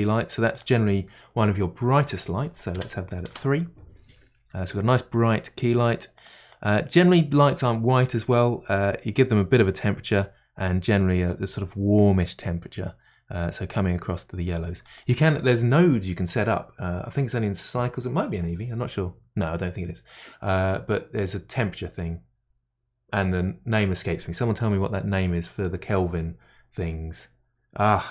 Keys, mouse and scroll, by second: 0.5-3.5 drag, 4.7-6.5 middle drag, 6.1 click, 6.9 click, 9.7 click.